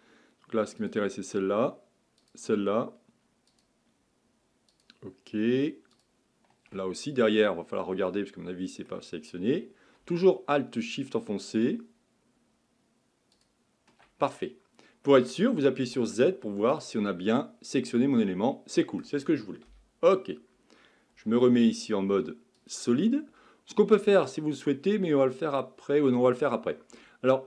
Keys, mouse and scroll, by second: 0.8 alt+shift+click, 2.2 alt+shift+click, 3.5 alt+shift+click, 4.7 alt+shift+click, 5.9 alt+shift+click, 7.1-10.2 middle drag, 11.5 alt+shift+click, 13.3 alt+shift+click, 14.3-15.8 middle drag, 15.8 z, 17.3-19.7 middle drag, 19.7 KP_1, 21.3 z.